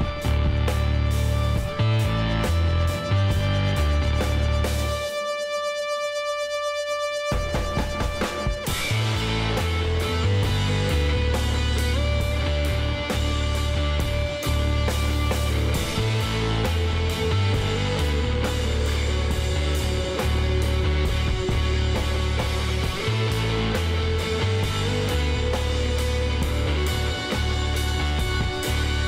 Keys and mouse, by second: 0.2-3.5 drag, 3.5-4.9 middle drag, 3.9 KP_1, 7.3-8.3 middle drag, 9.0-10.2 middle drag, 9.2 a, 10.2 a, 12.7 Tab, 14.2-15.9 drag, 16.9 Tab, 17.1 middle click, 18.2 middle click, 22.6 click, 22.9-24.5 middle drag, 25.3-27.0 drag, 27.7-29.0 drag.